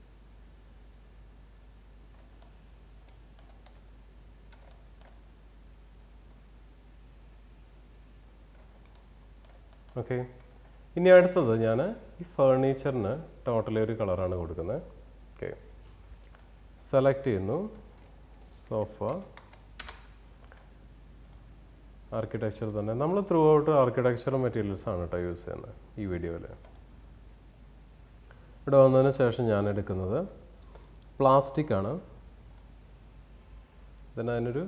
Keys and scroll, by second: 3.7 w, 19.4 a, 19.8 Return.